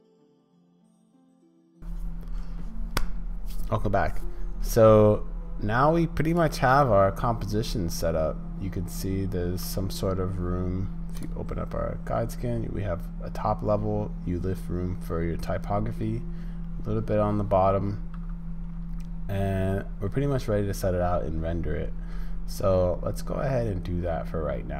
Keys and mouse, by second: 0.2 click, 0.4 click, 0.6 `, 0.7 shift+click, 0.8 middle click.